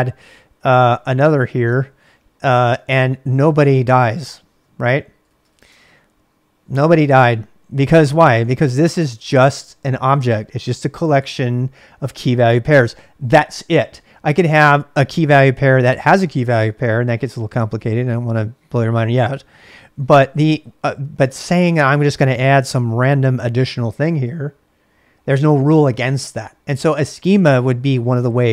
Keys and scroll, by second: 0.0-6.3 typing, 7.7-9.7 typing, 14.4 j, 19.9 j, 20.0 j.